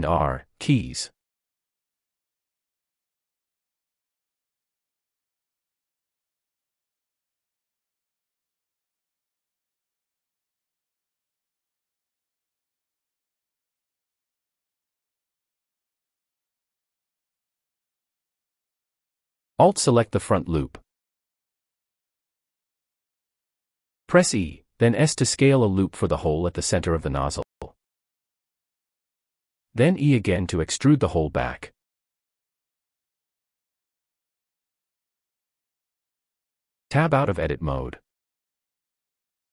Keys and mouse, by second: 0.8 shift+middle click, 1.5 shift+click, 1.6 shift+middle click, 2.4 g, 2.6 z, 3.7 s, 5.6 click, 6.3 click, 7.2 shift+click, 8.0 g, 8.4 x, 11.4 click, 12.0 click, 17.1 click, 19.4 alt+click, 21.7 click, 23.0 e, 23.9 s, 27.4 click, 29.0-30.4 middle drag, 31.4 e, 34.1 click, 34.8 click, 35.2 Tab, 37.1 drag, 37.2-37.6 middle drag, 38.6 click.